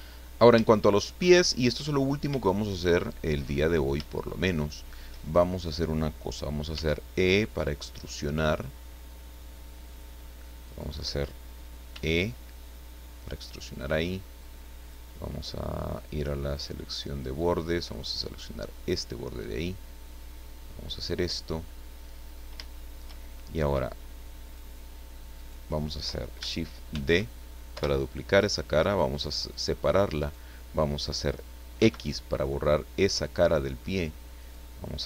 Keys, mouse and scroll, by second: 0.7 shift+middle click, 1.5 shift+middle click, 1.9 shift+scroll up 1, 2.4 shift+middle click, 3.3 scroll up 1, 3.3 middle click, 4.9 shift+middle click, 6.7 e, 9.9 click, 10.6 right click, 11.9 e, 14.8 click, 16.5 click, 17.7 right click, 18.6-21.3 drag, 22.1-22.5 scroll up 2, 22.7 shift+middle click, 24.4 click, 25.3 right click, 26.9 shift+d, 27.7 Return, 28.9 click, 30.2 right click, 31.8 x, 33.1 click, 34.4 right click.